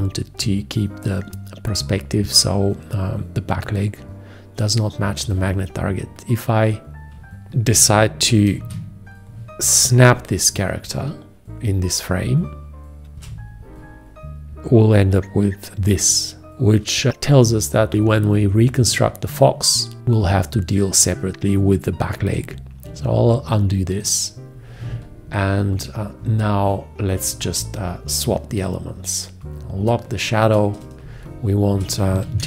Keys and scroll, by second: 8.8 ctrl+a, 13.1 space, 13.6 1, 13.6 `, 23.1 ctrl+z, 31.3 space.